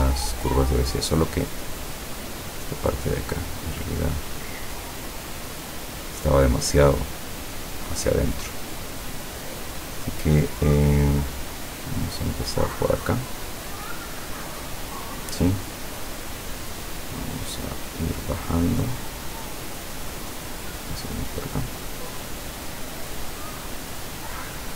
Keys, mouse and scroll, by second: 1.2 click, 2.0 click, 3.0-5.8 drag, 7.1 click, 14.7 click, 16.8-18.2 drag, 20.7 click, 24.2 click.